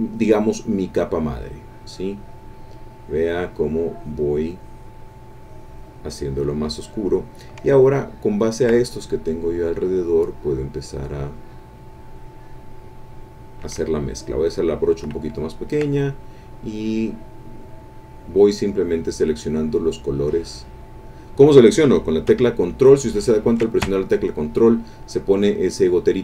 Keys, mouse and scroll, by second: 0.2-2.5 drag, 3.0 click, 3.9-6.1 drag, 6.2-7.3 drag, 8.5 ctrl+click, 9.3-15.0 drag, 15.6-21.2 ctrl+drag.